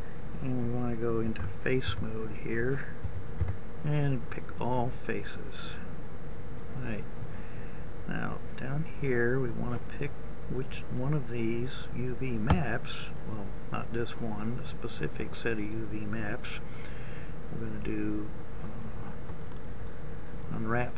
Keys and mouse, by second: 1.5 ctrl+Tab, 3.3 a, 3.8 a.